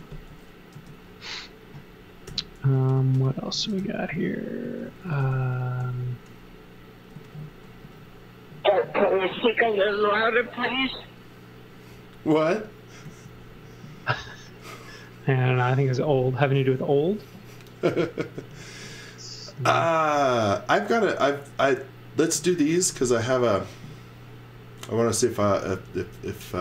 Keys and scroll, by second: 0.7 space, 1.7 space, 2.2 n, 3.7-5.7 typing, 7.1 z, 7.8 x, 9.3 x, 13.0 z, 13.9 x.